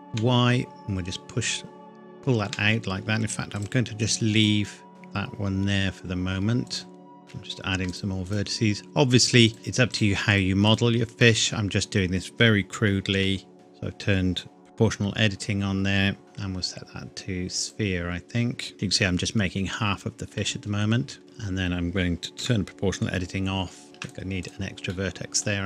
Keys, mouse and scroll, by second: 0.1 y, 2.5 Escape, 3.6 shift+click, 4.9 g, 6.7 click, 7.2 ctrl+r, 7.9 click, 11.2 middle click, 13.2 o, 13.5-14.0 scroll down 1, 14.0-14.4 scroll up 1, 16.2 click, 18.7 middle click, 20.6 Tab, 21.2 middle click, 22.4 o, 23.8 ctrl+r, 24.1 click, 24.9 middle click, 25.4 scroll up 1.